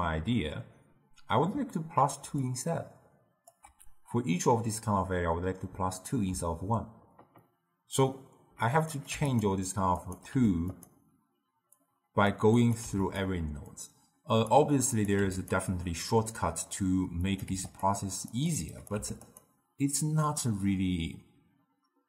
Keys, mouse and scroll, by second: 2.1 d, 2.4-3.4 drag, 3.4 d, 8.7 click, 9.9 click, 11.7 click, 12.5 click, 13.7-15.4 drag, 16.1 drag, 17.2 click, 18.2 click, 18.7 click.